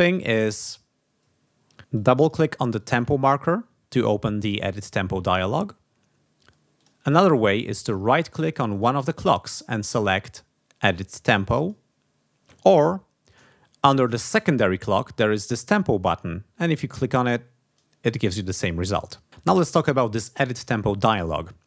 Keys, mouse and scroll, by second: 1.9 click, 2.7 click, 6.7 click, 8.7 right click, 11.5 click, 13.2 click, 16.6 click.